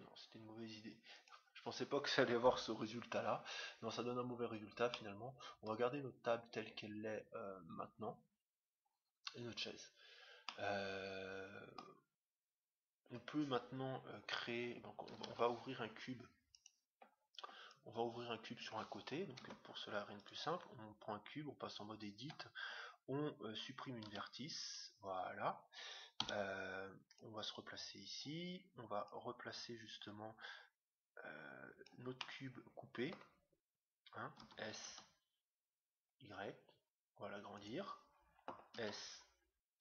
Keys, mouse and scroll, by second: 1.1-2.8 drag, 3.4 middle click, 4.2 scroll up 1, 4.9-6.5 middle drag, 6.5-6.9 scroll up 1, 8.5-8.9 scroll down 1, 9.8-10.6 scroll down 1, 10.6-12.0 middle drag, 15.2 shift+a, 17.6-19.3 drag, 19.5 Tab, 20.4-22.1 right drag, 24.1 x, 26.2 Tab, 27.1-28.8 drag, 29.1-30.7 drag, 32.1-33.9 middle drag, 34.3 s, 38.7 s.